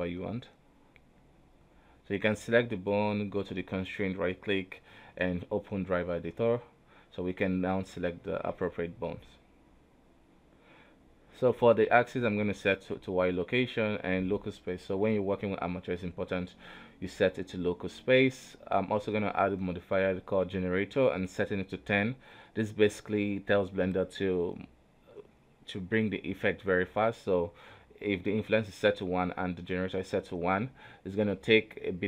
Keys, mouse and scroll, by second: 0.2 middle click, 0.8 Tab, 1.1-1.6 scroll down 1, 1.6 middle click, 1.8-2.4 scroll down 1, 2.4 click, 3.0 Tab, 3.5-4.1 scroll up 4, 4.1 right click, 4.5-5.2 scroll down 3, 6.0 click, 7.0-10.2 right drag, 27.6-28.4 scroll up 1, 28.4 right click, 28.6 g, 30.4 right click, 30.7 scroll down 3, 31.6 n.